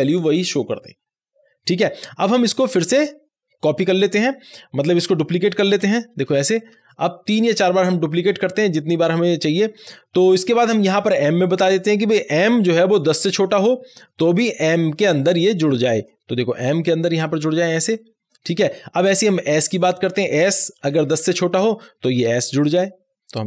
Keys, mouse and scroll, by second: 2.3 ;, 2.3-5.2 drag, 5.7 click, 6.2 alt+shift+Down, 8.3-10.2 scroll down 1, 11.0 scroll down 1, 11.0-12.6 drag, 12.6 m, 15.3 m, 15.5 click, 16.5 m, 17.3 click, 17.8 m, 19.6 click, 20.7 s, 22.7-23.4 drag.